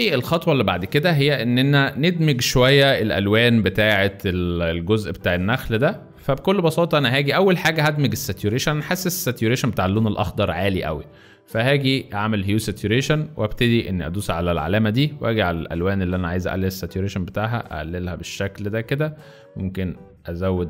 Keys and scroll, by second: 0.0-0.8 typing, 2.9 v, 7.6-8.8 typing.